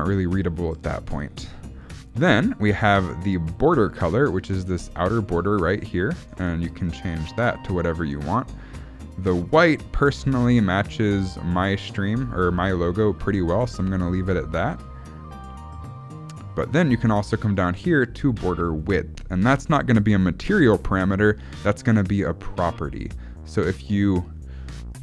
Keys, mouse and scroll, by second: 2.7 scroll down 1, 3.7 click, 6.2 click, 14.7 click, 18.8 click.